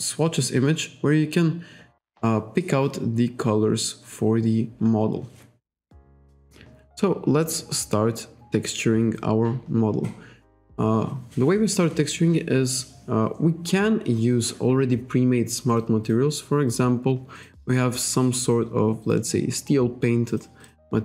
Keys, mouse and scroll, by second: 6.0 KP_5, 11.7 scroll down 1, 12.0-12.3 scroll up 1, 12.3-12.7 scroll down 1, 13.4-13.8 scroll up 1, 16.6-17.5 scroll down 2, 17.8 scroll down 1, 18.4-18.8 scroll down 1, 20.7 click.